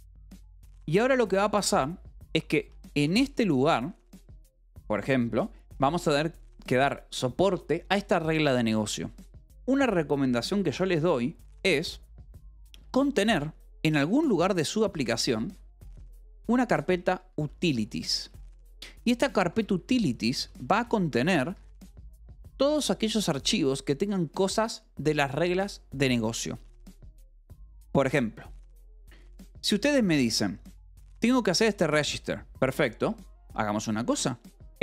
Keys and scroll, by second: 0.8 a, 2.0 Escape, 2.3 j, 2.8 k, 3.6 shift+v, 9.9 Escape, 12.7 k, 13.8 a, 14.0 Return, 15.2 Escape, 15.4-19.4 typing, 19.7 Return, 20.9 ctrl+g, 21.4-22.5 typing.